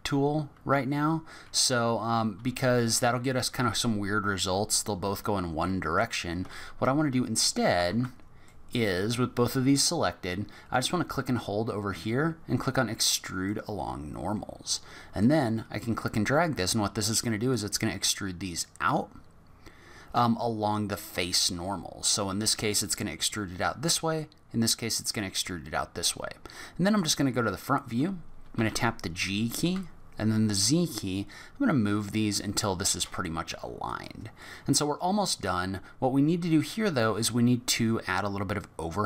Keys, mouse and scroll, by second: 7.9 ctrl+z, 8.4 middle click, 11.1 click, 13.4 click, 15.2 click, 26.9 click, 28.6 g, 34.4 middle click, 35.8-36.4 scroll down 3, 36.9 scroll up 3.